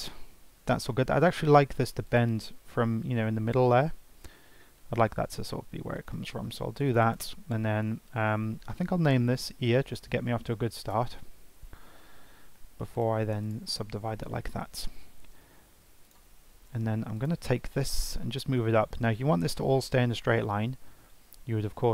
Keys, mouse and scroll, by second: 2.0 click, 2.7 g, 6.9 click, 7.0-9.7 right drag, 9.7 F2, 13.4-16.0 right drag, 16.0 click, 17.1 click, 17.8 g.